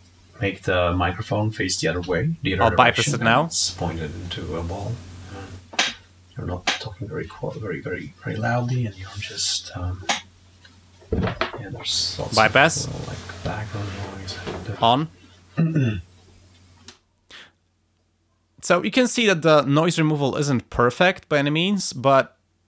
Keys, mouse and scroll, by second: 3.5 click, 5.4 click, 7.4-8.8 drag, 11.6 click, 14.5 click, 16.8 space.